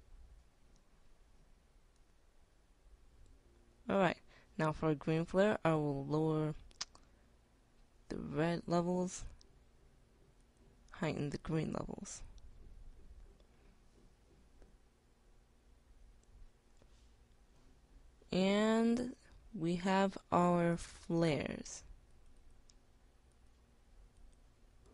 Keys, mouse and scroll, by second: 10.8-14.8 drag.